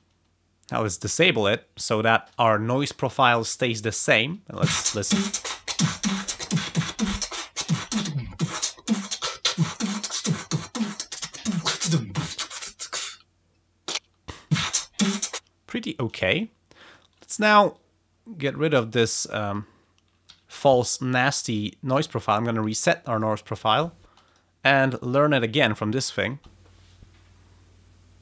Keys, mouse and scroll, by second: 16.1 click, 16.9 click, 17.5-19.7 drag, 20.3 alt+1, 21.2-22.3 drag, 23.1 click, 23.7 space, 24.3 click, 24.9 click, 26.3 space.